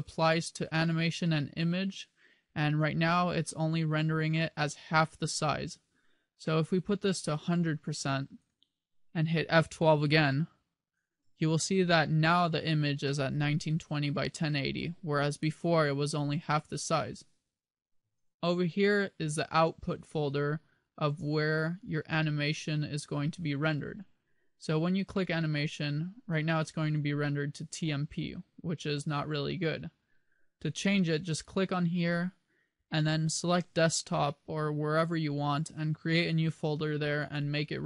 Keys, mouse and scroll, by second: 7.8 click.